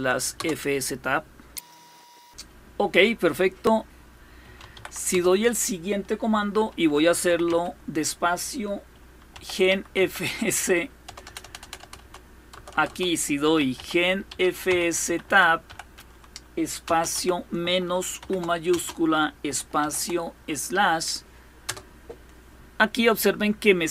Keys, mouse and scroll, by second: 0.0 Return, 1.9 click, 3.5-4.9 typing, 6.6-7.4 typing, 8.7-11.4 typing, 12.2 Return, 12.4 Return, 12.5 Return, 12.8-16.8 typing, 17.9-19.5 typing, 21.3 typing.